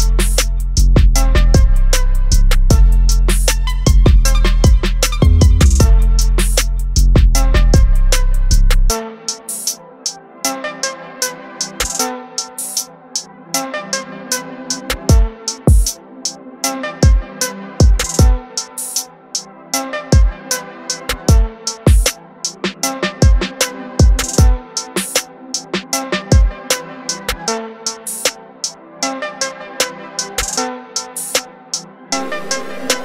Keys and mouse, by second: 0.1 click, 3.3 click, 12.0 click, 20.7 click, 24.6 click, 26.5 click, 28.5 click, 32.9 click.